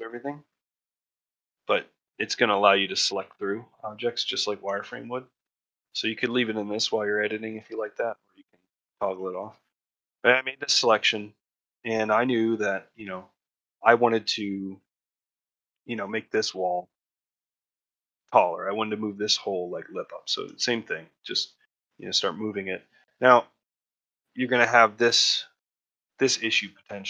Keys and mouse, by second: 0.1 middle click, 0.6-2.6 middle drag, 2.8 ctrl+middle click, 3.6 middle click, 4.7 shift+middle click, 5.4-7.5 middle drag, 9.0 shift+middle click, 9.7 shift+middle click, 12.6 middle click, 13.2 alt+middle click, 22.7 middle click.